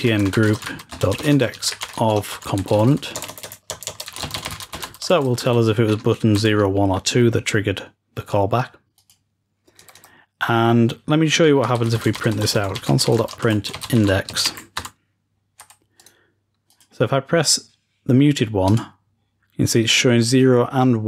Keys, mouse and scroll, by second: 8.8-9.8 drag, 15.9 click, 16.0 right click, 16.6-17.4 drag, 18.5 click.